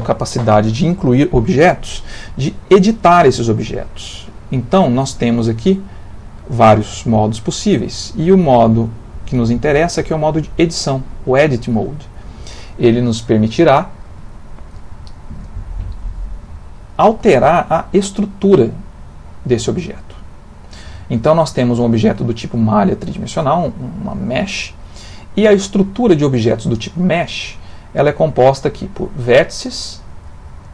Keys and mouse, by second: 6.0 click, 6.5 click, 13.4 ctrl+middle click, 14.3 shift+middle click, 14.9 ctrl+middle click, 16.0 click, 16.7 click, 17.7 click, 18.3 click, 18.8 click, 19.3 click, 28.0 click.